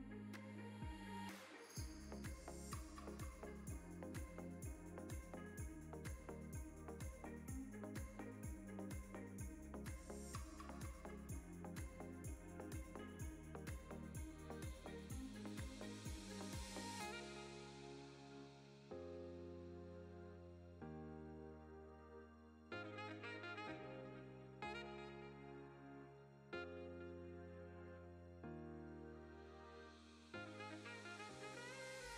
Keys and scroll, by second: 8.1 Tab, 9.4 ctrl+r, 12.4 s, 13.4 z, 18.3 g, 18.5 z, 21.4 o, 22.7 g, 23.1 z, 25.0 Tab, 28.7 3, 29.9 Tab, 30.9 3.